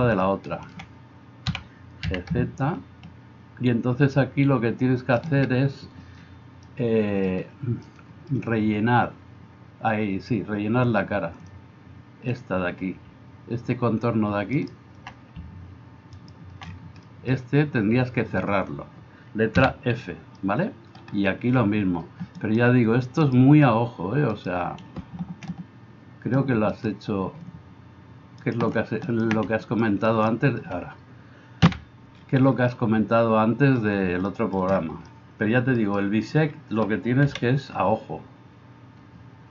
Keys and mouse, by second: 1.5 g, 11.4-39.5 drag, 14.6 middle click, 14.6 right click, 16.2 alt+middle click, 16.2 alt+right click, 19.6 f, 22.4 middle click, 22.4 right click, 24.4-26.9 middle drag, 24.4-26.9 right drag, 28.5 middle click, 28.5 right click, 29.6 alt+middle click, 29.6 alt+right click, 30.1 alt+middle click, 30.1 alt+right click, 31.7 f, 37.3 KP_1.